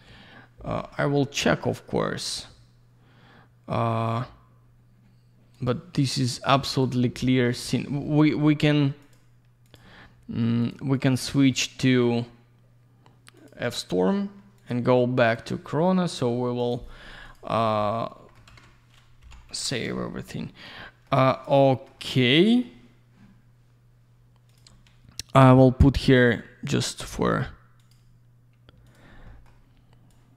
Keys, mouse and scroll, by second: 0.6 F10, 2.2 click, 2.2 click, 5.5 click, 5.6 click, 6.2 click, 6.3 click, 6.4 click, 6.5 click, 6.7 click, 6.8 double click, 9.0 click, 9.1 click, 9.7 click, 9.7 click, 10.6 click, 10.7 click, 10.9 click, 11.1 double click, 11.2 click, 11.3 click, 11.5 click, 11.6 double click, 13.4 click, 13.5 click, 14.6 click, 14.7 click, 15.3 click, 15.5 click, 16.6 click, 16.7 click, 17.2 click, 17.3 click, 17.7 alt+middle click, 18.5 ctrl+я, 19.2 3, 19.9 alt+middle click, 20.8 middle click, 21.2 alt+я, 21.3 click, 21.4 click, 21.6 middle click, 22.0 alt+middle click, 24.5 click, 24.5 click, 26.8 click, 27.0 click, 27.8 click, 27.9 click, 28.9 click, 28.9 click, 29.3 middle click, 29.4 middle click, 29.8-30.1 scroll down 1, 30.1 click.